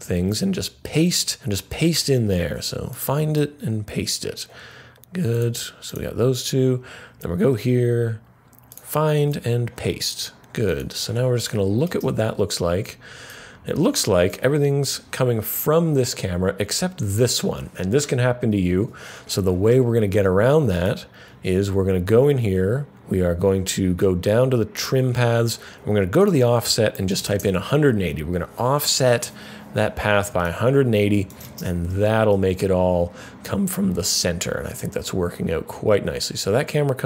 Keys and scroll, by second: 0.2 super+v, 3.2 super+v, 9.1 super+v, 26.7-27.7 typing.